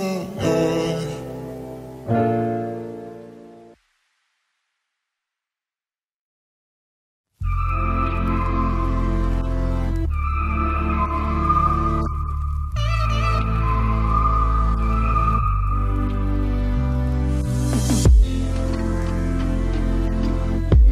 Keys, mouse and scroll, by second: 1.3 s, 2.2 g, 3.9 KP_Decimal, 4.8-6.7 middle drag, 5.6 s, 6.8 click, 7.0 Tab, 7.5 ctrl+Tab, 8.8 r, 10.6 s, 11.6-13.4 drag, 12.8 s, 14.1-16.0 middle drag, 15.1 e, 17.0 r, 17.9 e, 20.6 r.